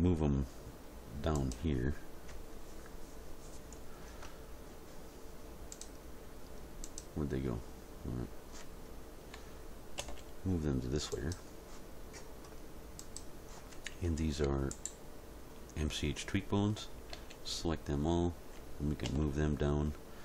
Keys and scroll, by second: 10.0 m, 16.8 a, 19.0 m.